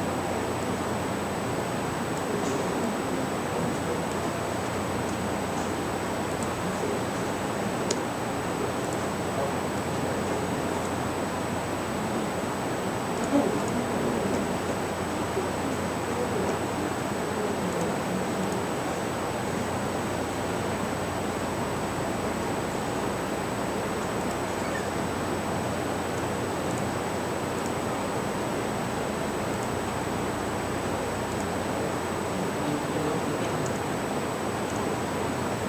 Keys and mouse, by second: 0.7-5.1 drag, 6.3 right click, 8.0 x, 8.9-9.8 right drag, 10.9-17.5 drag, 18.8 click, 24.3 right click, 26.8 x, 28.5 right click, 33.7 shift+d.